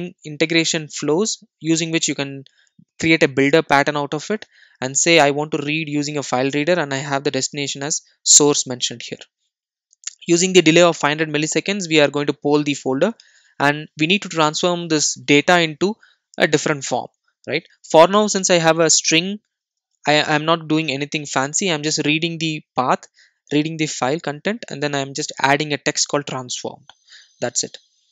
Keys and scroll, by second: 18.3 super+e, 27.0 super+e.